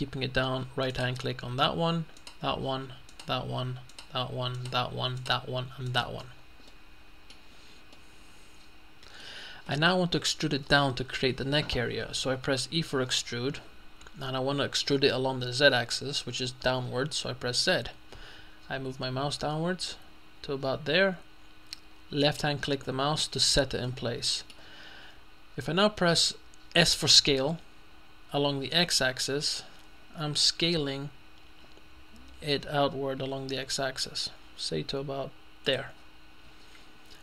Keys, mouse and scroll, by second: 1.0 shift+right click, 2.5 right click, 3.2 right click, 4.0 right click, 4.6-5.8 right drag, 5.9 right click, 6.4-6.7 scroll down 1, 6.7 middle click, 7.6-8.3 scroll down 2, 8.0 middle click, 12.9 e, 17.6 z, 22.2 click, 23.9-25.6 middle drag, 26.8 s, 28.8 x, 35.7 click, 37.1 middle click.